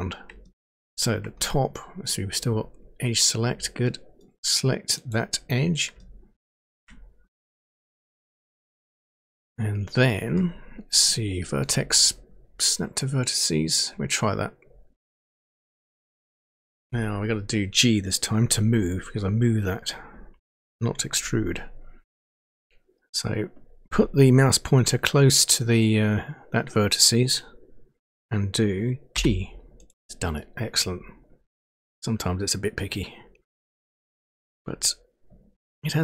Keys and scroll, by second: 29.1 g.